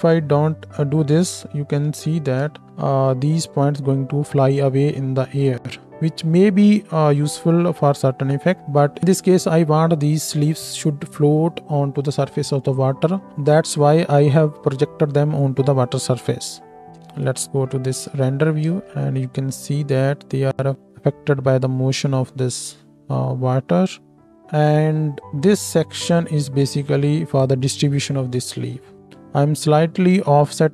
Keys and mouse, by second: 1.8 KP_1, 2.5 space, 8.6 space, 8.6 KP_0, 16.9 space, 17.2 z, 18.1 z, 19.0 space, 24.3-25.6 middle drag, 24.3-25.6 right drag, 30.4 KP_1.